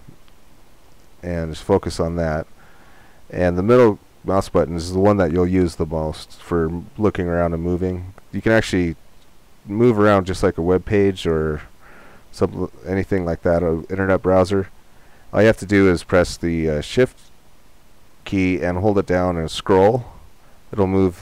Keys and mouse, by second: 0.5 click, 1.1 middle click, 1.9 click, 3.0-6.0 middle drag, 8.3-9.9 middle drag, 19.5 click, 19.9-21.2 middle drag.